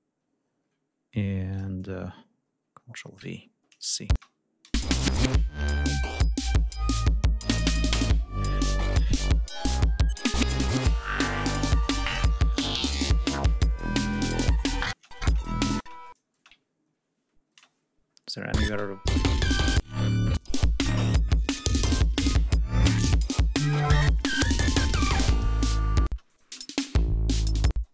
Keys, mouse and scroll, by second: 0.1 ctrl+scroll up 2, 1.3 ctrl+scroll down 2, 2.9 ctrl+v, 3.8 click, 3.8 space, 5.4 ctrl+scroll down 2, 5.8 ctrl+scroll up 2, 13.1 ctrl+scroll down 2, 14.6 space, 14.7 click, 15.7 ctrl+click, 16.3 scroll up 2, 17.2 space, 17.8 scroll down 2, 18.4 ctrl+space, 21.8-22.2 ctrl+scroll up 3, 23.0-23.3 scroll down 2, 25.8 space, 25.9 click, 26.4 ctrl+scroll up 2, 27.4 ctrl+space.